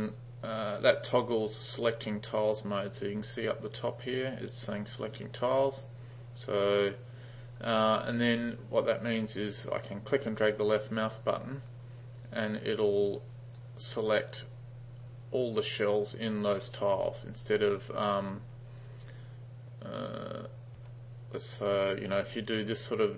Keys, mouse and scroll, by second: 11.7-13.6 drag, 20.9 ', 21.6 drag, 22.5-23.1 drag.